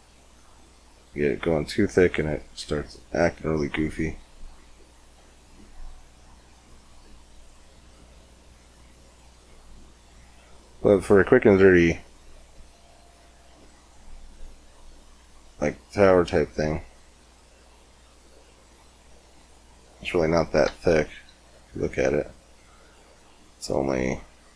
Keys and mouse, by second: 0.1-1.6 middle drag, 2.8 middle click, 3.3-4.7 drag, 6.9 click, 7.6 middle click, 8.4 click, 9.0 middle click, 10.6 middle click, 10.6 click, 10.7 middle click, 11.8 Tab, 12.4 Tab, 14.8 middle click, 15.2 middle click, 15.9 Tab, 20.7 KP_7, 21.0 KP_5, 21.6 z, 22.5-24.4 middle drag.